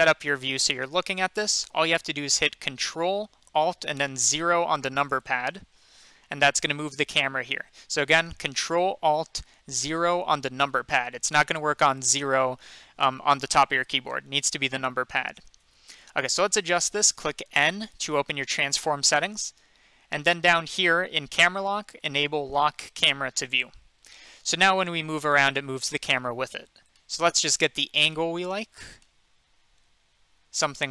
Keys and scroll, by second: 17.4 n.